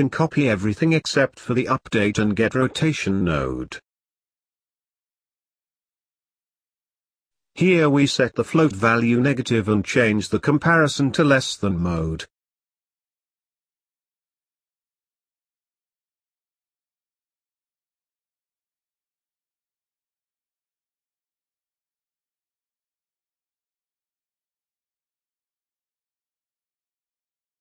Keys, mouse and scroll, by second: 0.4 scroll down 1, 0.5 middle click, 3.4 click, 4.1 click, 6.5 scroll up 2, 6.6 middle click, 7.5-8.3 scroll up 2, 8.3-11.4 drag, 11.8 click, 14.0-16.6 drag, 16.6-17.2 scroll down 3, 17.2 middle click, 18.1-22.2 drag.